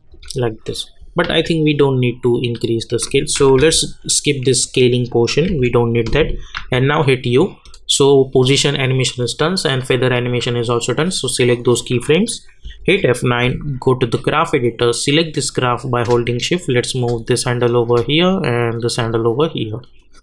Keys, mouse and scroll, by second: 1.2 ctrl+z, 3.6 j, 4.4-6.5 drag, 6.5 u, 8.0 click, 10.9-12.6 drag, 12.6 F9, 13.9-20.0 drag.